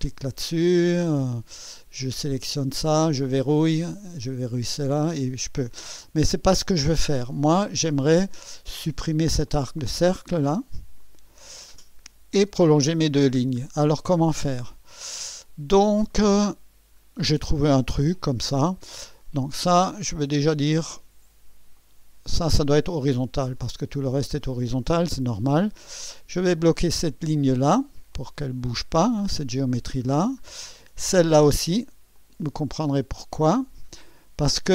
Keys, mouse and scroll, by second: 0.0 click, 1.2-1.5 scroll down 2, 2.3 click, 7.1 scroll down 2, 7.6-8.9 scroll up 6, 9.5 click, 11.0 click, 12.2 Delete, 13.3-14.0 scroll down 4, 14.3-15.3 right drag, 15.5 scroll down 2, 16.1-17.0 right drag, 17.1 scroll down 2, 20.4 click, 21.7 click, 23.4-23.8 scroll down 2, 24.4 scroll up 2, 26.8 click, 28.1 click, 30.1-30.5 scroll down 2, 32.1 click, 33.9 click.